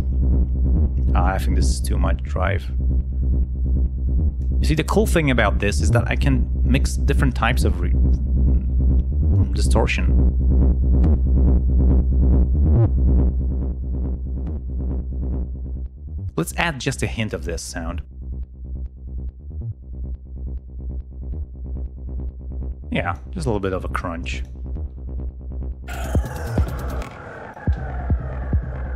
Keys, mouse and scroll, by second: 1.1 click, 4.5 click, 4.8 right click, 5.8-6.8 drag, 7.2 click, 9.2-11.3 drag, 12.9-14.9 drag, 15.2-16.7 drag, 18.4-19.6 drag, 23.2 click, 24.3 click, 25.8 click, 26.4 ctrl+scroll down 2, 27.0 ctrl+space, 27.3 ctrl+click, 27.6 ctrl+space.